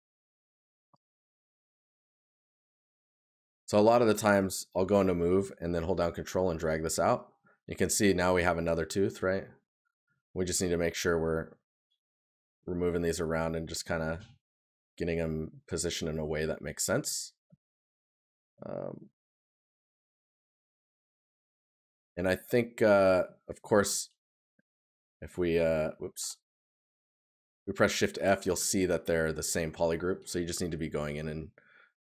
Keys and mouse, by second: 1.1 right click, 6.9 right click, 9.5 right click, 16.9 right click, 19.3 right click, 27.7 right click.